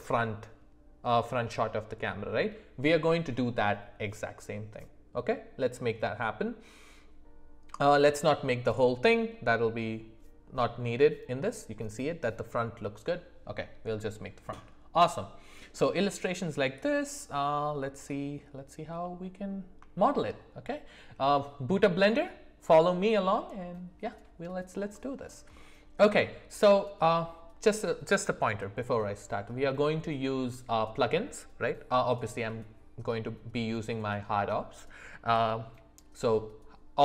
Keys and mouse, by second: 15.1-15.7 middle drag, 19.0 middle click, 19.9 shift+middle click, 24.9 middle click, 25.5 shift+middle click.